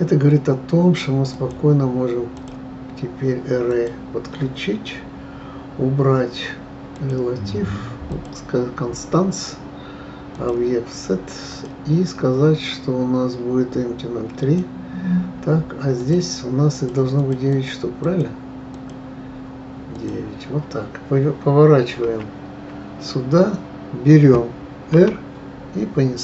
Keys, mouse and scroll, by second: 1.3 click, 2.3-5.3 drag, 6.9 click, 8.1 click, 10.3 click, 11.5-14.5 drag, 16.0-19.8 drag, 19.9 click, 22.0 KP_1, 23.3-24.9 scroll down 2, 24.9 r.